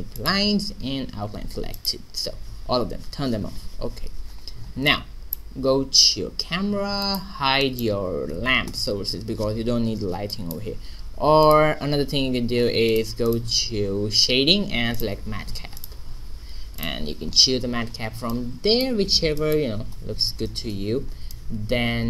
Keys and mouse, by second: 3.6 middle click, 5.2-6.5 middle drag, 5.5 q, 7.7-8.8 drag, 8.6 h, 8.8 right click, 11.3 middle click, 11.4-17.4 drag, 17.4 middle click, 17.7-19.9 middle drag, 19.9 n, 20.0 middle click.